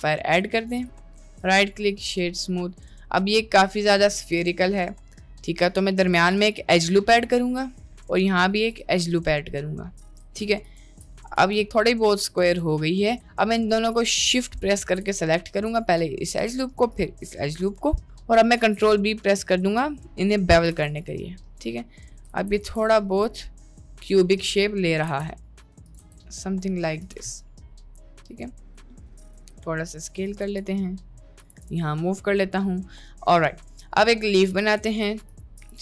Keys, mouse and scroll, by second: 1.2 right click, 1.5 drag, 2.1-4.3 middle drag, 4.4 Tab, 4.8 middle click, 6.2 ctrl+r, 7.0 middle click, 8.2 ctrl+r, 9.3 middle click, 11.2 middle click, 11.4 Tab, 11.8 middle click, 12.4 Tab, 12.7 middle click, 13.5 middle click, 15.1 click, 15.6 middle click, 17.0 alt+shift+click, 17.4 middle click, 18.5 ctrl+b, 20.8 Tab, 21.1-22.1 middle drag, 22.6 ctrl+z, 22.9 middle click, 23.5 middle click, 24.4 middle click, 25.3 ctrl+b, 26.0 Tab, 26.4-26.8 middle drag, 27.5-28.3 middle drag, 29.3 s, 30.4 g, 31.9-32.5 middle drag, 33.4-34.4 middle drag, 34.8 shift+a.